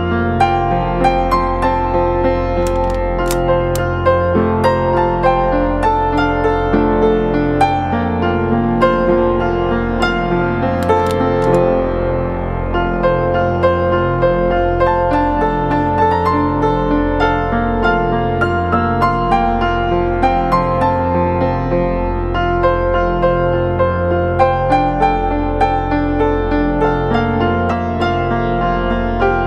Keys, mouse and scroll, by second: 0.4 ctrl+=, 1.5-2.3 alt+scroll down 1, 20.3-21.2 scroll down 1, 21.5 double click, 23.2-23.9 typing, 25.2 typing.